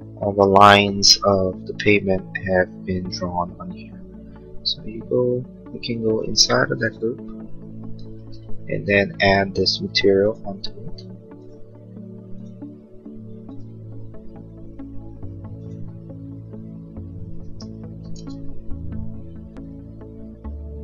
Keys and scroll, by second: 0.2 space, 18.0 ctrl+z.